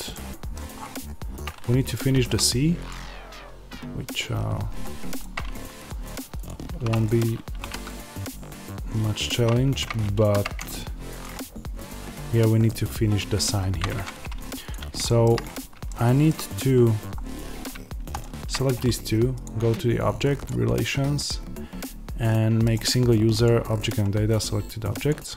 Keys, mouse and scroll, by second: 0.6-1.2 scroll up 1, 1.2-1.9 scroll down 1, 2.8 click, 5.4 Tab, 5.8 click, 6.7 3, 6.8 click, 7.5 g, 9.2 click, 9.5 Tab, 13.8 Tab, 14.6 click, 14.9-18.1 shift+middle drag, 15.3-15.8 scroll up 2, 16.2-17.0 scroll down 2, 17.0-18.1 scroll up 2, 18.1 shift+click, 23.3-25.0 drag.